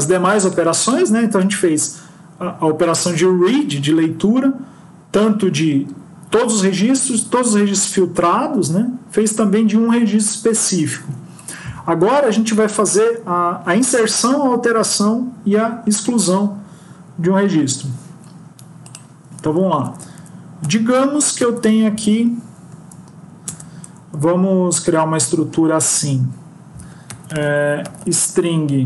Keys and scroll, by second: 17.5 Home, 19.6 ctrl+Left, 21.3 ctrl+shift+Right, 22.3 Up.